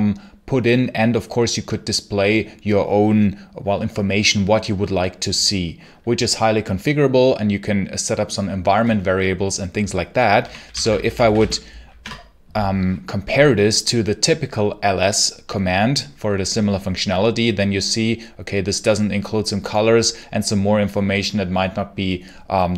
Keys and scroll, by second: 10.0-11.7 typing, 11.8 Return.